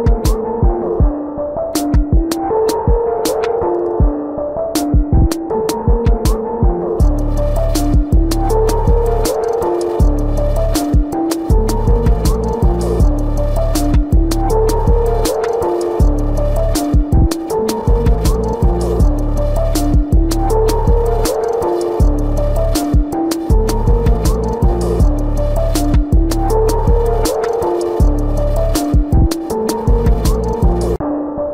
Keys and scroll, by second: 2.3 ctrl+=, 5.4 ctrl+-, 6.6 ctrl+-, 9.3 space, 10.5 space, 12.6 space, 14.0 space, 15.0 space, 16.6 ctrl+alt+z, 18.5 space, 19.3 ctrl+alt+z, 20.0 space, 20.7 space, 21.8 space, 22.9 space, 26.8 space, 28.7 space, 29.0 space, 30.8 ctrl+alt+z.